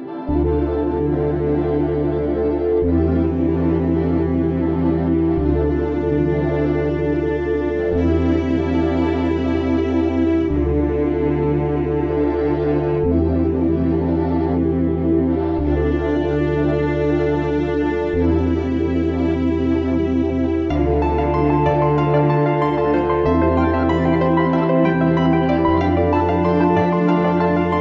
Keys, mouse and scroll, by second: 0.4 click, 0.8 right click, 1.9 click, 7.6 click, 13.8 click, 13.9 click, 16.6 click, 18.8 click, 21.0-21.9 scroll down 1, 21.9 click, 23.5 click, 26.3 click.